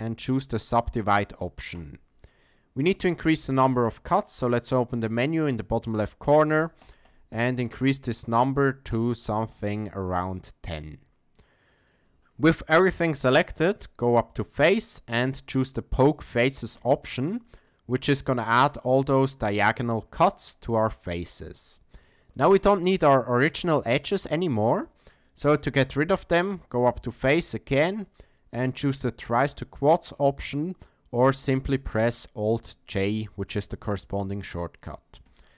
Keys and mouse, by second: 6.2 click, 6.5 click, 6.8 click, 7.0 click, 7.4 click, 7.7 click, 8.3 click, 8.9 click, 9.5 click, 11.8 click, 14.0-16.9 drag, 17.4 shift+middle click, 17.9 middle click, 22.1 shift+middle click, 22.5 middle click, 24.8 shift+middle click, 25.2 middle click, 26.9-35.4 drag.